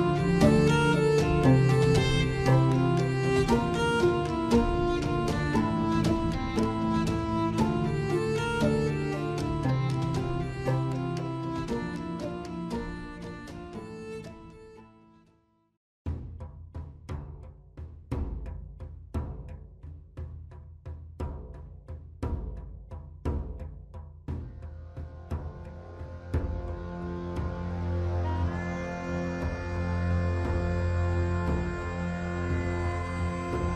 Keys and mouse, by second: 2.4 g, 8.8 alt+h, 10.3 click, 11.8 g, 14.6 Tab, 16.8 KP_1, 19.0 s, 23.8 KP_7, 25.2 1, 28.2 ctrl+r, 33.2 click.